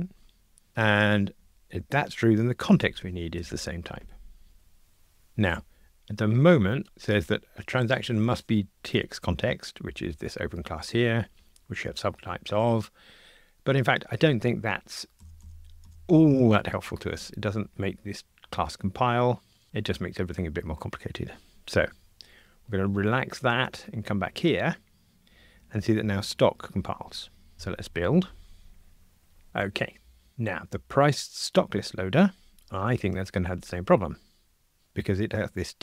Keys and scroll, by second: 3.4 Escape, 6.0 Escape, 6.8 super+b, 27.5 super+F9, 33.2 super+b.